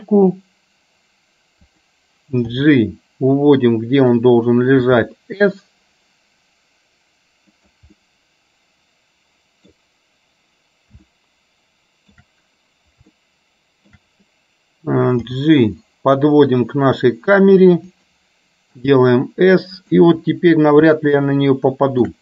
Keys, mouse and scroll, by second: 2.6 g, 4.9 s, 8.1-9.9 middle drag, 11.1-12.2 shift+middle drag, 15.4 g, 18.9 s, 21.1-22.2 middle drag.